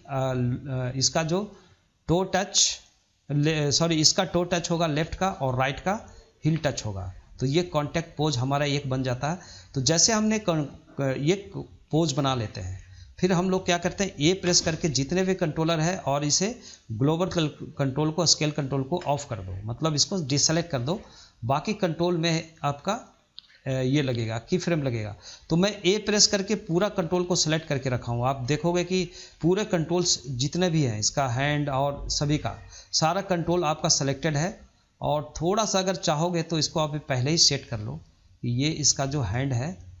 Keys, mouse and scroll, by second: 0.9-3.9 shift+middle drag, 9.2-10.0 shift+middle drag, 10.0-10.5 scroll down 2, 10.5-14.3 shift+middle drag, 14.3 a, 16.6 ctrl+click, 24.1-33.2 middle drag, 36.4 click, 37.5 click, 38.7-40.0 middle drag.